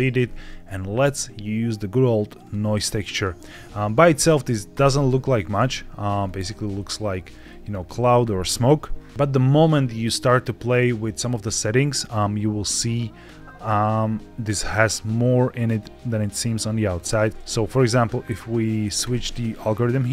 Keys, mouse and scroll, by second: 0.1 scroll up 2, 0.4 shift+a, 3.5 middle click, 4.6 ctrl+shift+click, 6.0-6.4 scroll up 3, 6.6 shift+middle click, 14.5-15.6 drag, 16.7 click, 18.9-20.1 drag.